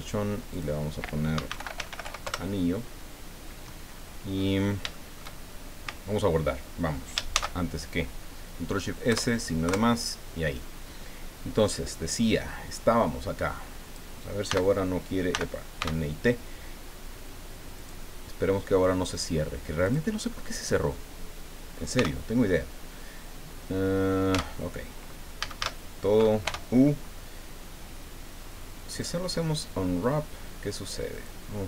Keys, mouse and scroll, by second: 0.5 click, 1.1-2.5 typing, 4.3 scroll up 2, 4.9 shift+click, 7.3 ctrl+shift+s, 9.1 KP_Add, 9.6 KP_Enter, 12.7-14.1 drag, 14.4 n, 15.3 n, 15.8 t, 17.7 click, 19.8 click, 21.9 t, 24.3 Tab, 25.4 a, 26.4 u, 29.0 click, 31.1 click.